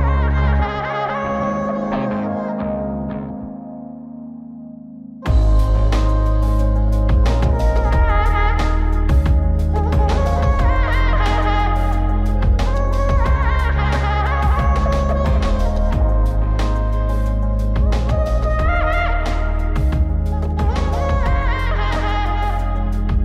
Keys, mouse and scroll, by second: 1.3 click, 2.2 click, 3.6 click, 4.0 click, 4.8 click, 8.3 middle click, 9.9-11.1 drag, 12.2 click, 12.9-14.1 drag, 14.6 middle click, 15.8 click, 16.5 click, 18.4 click, 19.5 click, 20.5 click, 22.5-23.2 drag.